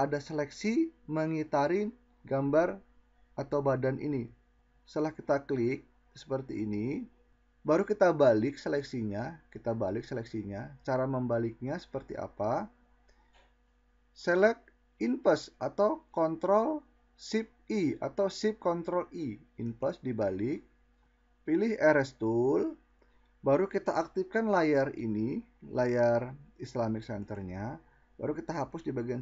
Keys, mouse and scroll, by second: 16.3 ctrl+shift+i.